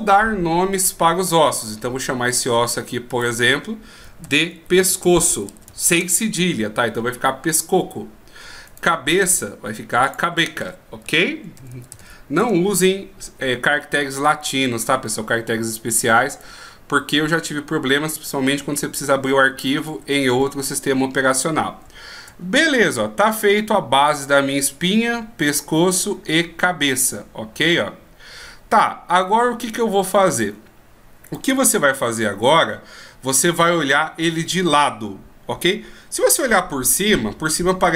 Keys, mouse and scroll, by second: 3.3 click, 8.9 right click, 10.2 click, 16.4 d, 16.6 right click, 20.2 d, 22.2-23.4 shift+scroll down 2, 23.4 scroll down 1, 28.9 right click, 29.8 right click, 30.5 right click, 31.5 right click, 36.8 KP_7.